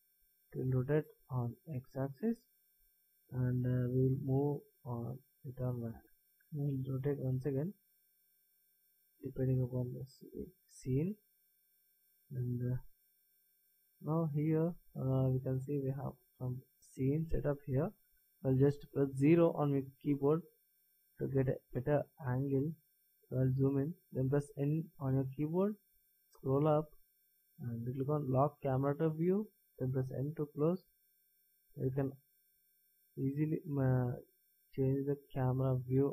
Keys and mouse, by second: 3.7-5.6 drag, 6.3 b, 7.3 b, 12.7-13.6 middle drag, 13.9-14.5 middle drag, 14.5-14.9 middle drag, 15.0 middle click, 15.2 middle click, 19.9 KP_0, 21.9-25.1 middle drag, 25.1 n, 26.0 n, 26.3-28.8 middle drag, 28.8-30.9 drag, 29.9 n, 31.0 middle click, 31.8-34.5 middle drag.